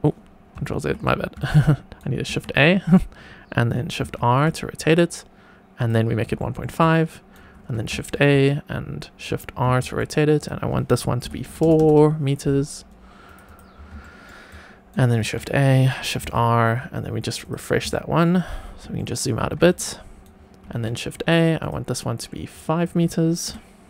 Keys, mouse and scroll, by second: 0.6 ctrl+z, 1.3 shift+right click, 2.2 shift+a, 3.9 shift+r, 5.7 click, 6.3 shift+middle click, 6.7 shift+right click, 7.9 shift+a, 9.6 shift+r, 10.3-13.2 drag, 11.5 KP_0, 11.7 KP_0, 13.4 click, 13.9 shift+middle drag, 14.4 shift+right click, 15.1 shift+a, 16.1 shift+r, 17.4 click, 17.8 shift+middle click, 18.5-18.9 scroll down 2, 18.9 shift+middle click, 19.6 shift+right click, 20.6 shift+a, 21.5 click, 22.3-23.8 drag.